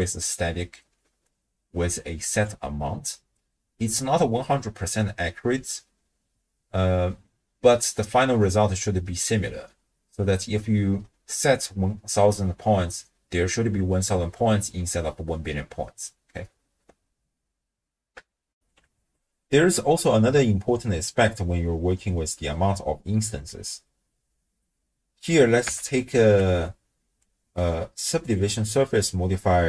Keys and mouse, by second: 0.0-2.5 drag, 18.6 ctrl+alt+shift+w, 18.6 ctrl+alt+shift+q, 25.7 n, 26.4 n, 27.4 click, 28.4 click, 28.9-29.6 drag.